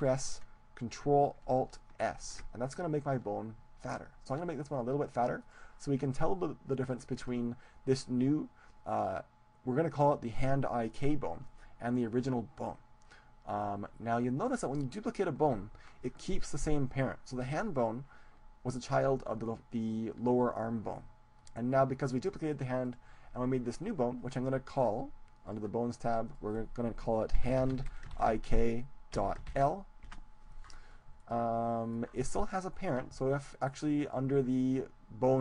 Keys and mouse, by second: 2.1 ctrl+alt+s, 5.8-7.5 drag, 7.5-15.4 middle drag, 17.8-19.7 right drag, 20.4-22.4 right drag, 22.8-24.6 right drag, 25.4-28.0 drag, 31.2-33.2 middle drag.